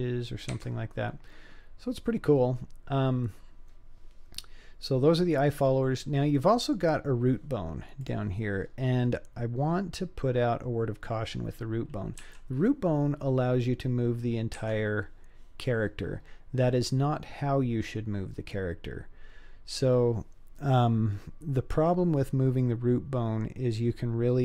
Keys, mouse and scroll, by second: 1.0-1.3 scroll down 3, 1.7-3.5 scroll up 2, 5.5-5.9 scroll down 4, 6.4-6.8 middle drag, 6.4 scroll down 2, 7.0-8.0 scroll down 3, 8.0 click, 8.6-10.0 scroll up 2, 10.0-10.7 scroll up 2, 11.0-12.2 scroll down 4, 12.2 g, 15.6-16.0 scroll down 3, 16.1-17.1 scroll up 3, 17.1 scroll down 1, 17.2-17.9 scroll down 1, 17.9 scroll up 1.